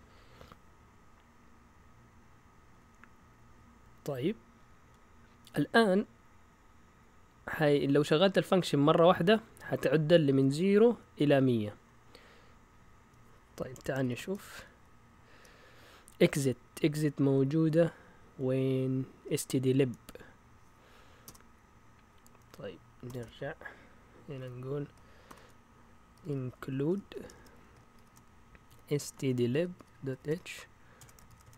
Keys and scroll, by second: 2.7 Down, 2.9 Down, 3.1-4.8 typing, 9.3 Up, 9.9-11.1 typing, 12.6 Down, 12.7-14.5 typing, 13.7 Escape, 21.3 Return, 23.0 typing, 24.3-31.5 typing.